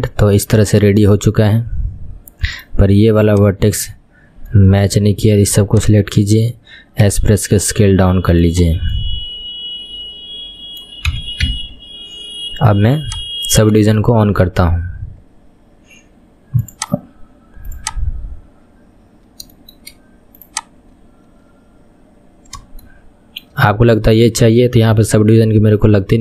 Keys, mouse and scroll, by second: 0.4-3.4 middle drag, 3.4 click, 3.8 Tab, 4.2-4.6 scroll up 5, 4.6-6.3 middle drag, 6.3 click, 7.2 s, 8.8-9.1 scroll down 5, 9.1-11.3 middle drag, 11.3 KP_1, 11.6 Tab, 11.9-13.0 scroll down 4, 13.0 click, 14.2-16.8 shift+middle drag, 16.8 click, 17.9 click, 18.2-18.8 scroll up 4, 18.8-19.2 scroll up 7, 19.2-19.7 scroll down 6, 19.7-20.6 shift+middle drag, 20.6 click, 21.1-21.5 scroll down 5, 23.0-26.2 shift+middle drag.